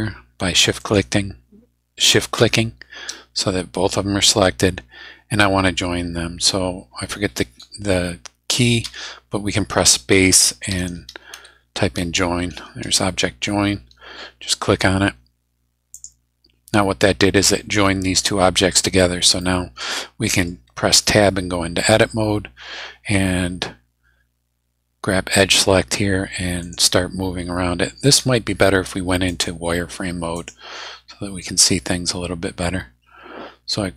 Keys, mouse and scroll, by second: 0.8 shift+right click, 8.8 space, 10.7 j, 10.8 o, 11.1 i, 11.3 n, 15.9 click, 19.0 scroll down 1, 19.3 scroll up 1, 19.4-20.6 drag, 21.0 Tab, 26.6 right click, 29.3 click, 30.3 click, 32.5 scroll up 1.